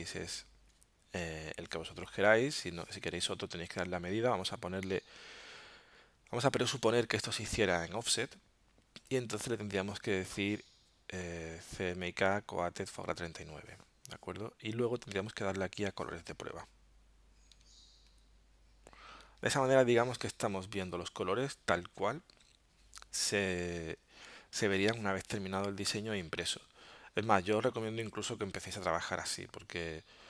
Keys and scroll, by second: 0.1 alt+super+-, 17.4 alt+super+0.